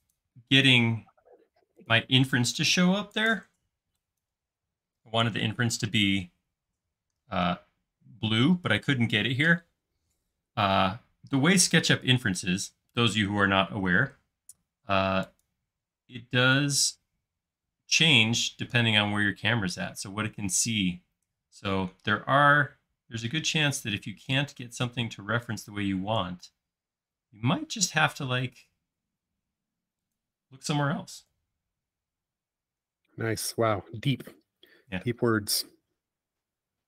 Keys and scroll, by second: 2.2 e, 12.0 l, 31.4 c, 35.6 Down.